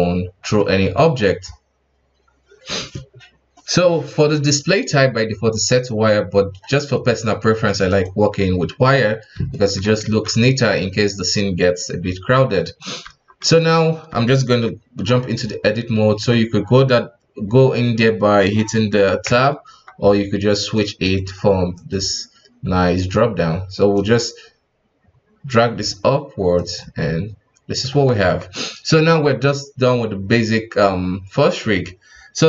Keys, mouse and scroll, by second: 0.7 KP_1, 1.2-4.4 scroll down 4, 5.5-8.5 drag, 8.8-9.5 scroll up 2, 9.5 shift+middle click, 10.0 alt+a, 12.6 right click, 13.0 Tab, 13.4 right click, 14.1 space, 15.0 space, 16.1 Tab, 19.2 Tab, 19.7 Tab, 20.6-26.8 drag, 26.8-27.9 middle drag, 27.9 KP_1, 28.2 Tab.